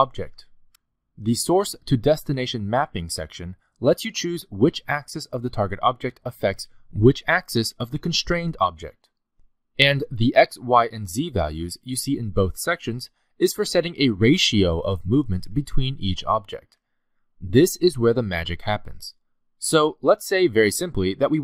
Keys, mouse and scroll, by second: 3.4 click, 5.8 click, 10.4 click, 15.5 click, 18.1 click.